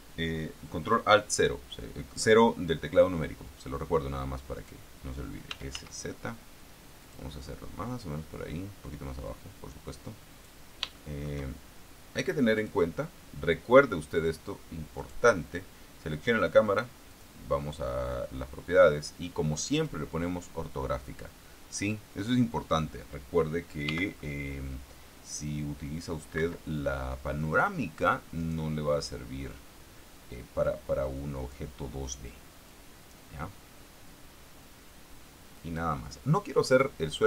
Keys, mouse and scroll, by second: 4.9 right click, 5.9 s, 6.1 z, 7.4 click, 8.7-11.0 drag, 11.3 shift+middle click, 12.9 click, 15.3 right click, 17.4 click, 20.1 click, 24.2 g, 24.4 middle click, 26.7 Escape, 28.7 right click, 29.8-32.0 drag, 33.0-36.3 drag.